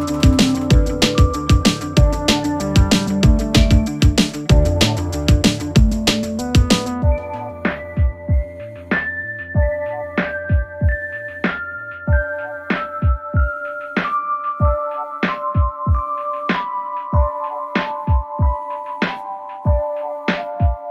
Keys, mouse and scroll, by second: 4.1-4.8 alt+scroll down 2, 4.8 alt+scroll up 1, 5.0 space, 5.0-5.9 click, 5.3 space, 5.9 space, 6.3 click, 7.8 click, 10.6 click, 12.9-14.4 drag, 15.7-16.5 alt+scroll down 2, 16.5 click, 16.9-17.5 alt+scroll down 2, 17.5 space, 17.6-18.0 click, 17.8 space, 18.2 alt+scroll up 1, 18.3 space, 18.4-18.8 click, 18.7 space, 19.4-20.9 drag.